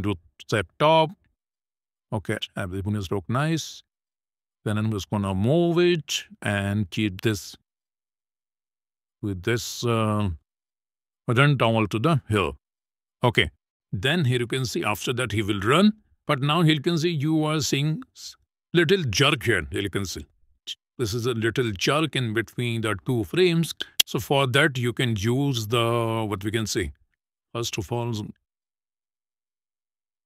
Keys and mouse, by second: 2.0 middle click, 4.4 click, 5.9-8.3 drag, 10.2 click, 10.8 click, 11.1-12.5 drag, 14.1 space, 15.1 space, 15.4 click, 20.4 click, 21.3 click, 24.0 click, 26.6 click, 27.4 click.